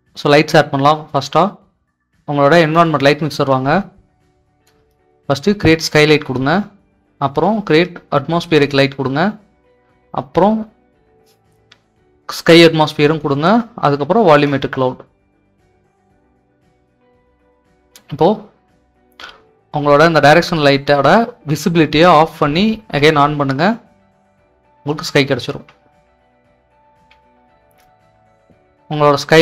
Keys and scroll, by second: 24.5-28.3 typing.